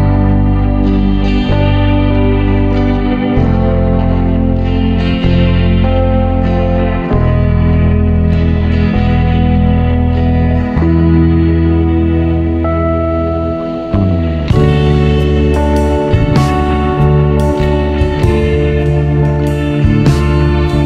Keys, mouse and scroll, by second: 2.0-3.3 scroll up 1, 3.3 scroll up 1, 3.4-9.7 drag, 9.7-10.3 scroll down 10, 10.3 click, 12.0-15.0 drag, 18.8-20.8 drag.